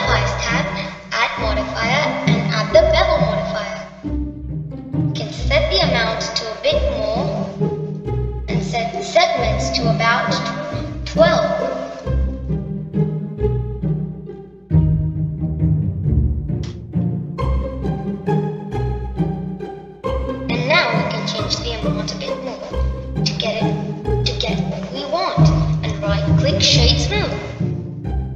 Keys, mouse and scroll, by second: 1.7 click, 2.9-6.0 drag, 7.3-10.4 drag, 10.8-13.9 drag, 14.2 click, 15.1 1, 20.6-23.1 middle drag, 23.1-25.5 drag, 25.5-27.6 middle drag, 27.6-28.3 right drag.